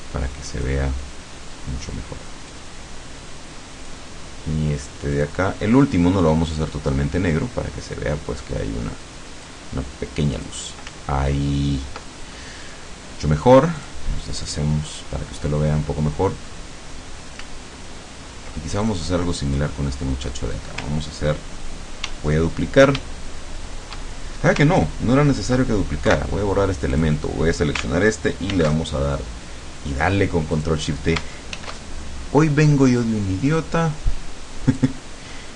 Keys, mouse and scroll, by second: 2.5-4.1 drag, 5.2 click, 7.2-9.7 drag, 10.5 click, 11.1-11.7 ctrl+scroll down 2, 12.1 ctrl+middle click, 12.7 ctrl+click, 13.8 click, 14.5 click, 15.2 scroll up 2, 15.9 scroll down 2, 17.7-18.5 ctrl+scroll up 2, 18.9 ctrl+click, 19.3-20.5 ctrl+middle drag, 22.1 ctrl+d, 26.1 Delete, 26.9 click, 28.5 ctrl+shift+d, 30.6 click, 31.5 ctrl+shift+f, 34.9 click.